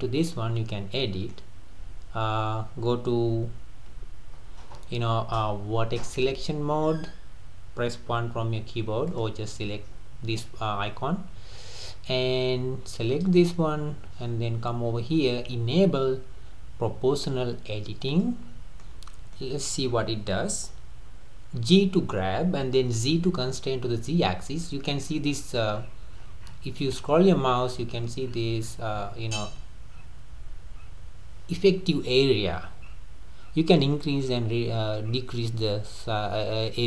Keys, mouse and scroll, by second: 0.0-0.3 scroll down 1, 0.3-3.5 middle drag, 3.9 2, 5.7 1, 8.1 1, 9.1 click, 12.4-12.9 scroll up 3, 13.4 click, 18.1 click, 18.5-18.8 scroll down 3, 18.8-21.7 middle drag, 21.7 g.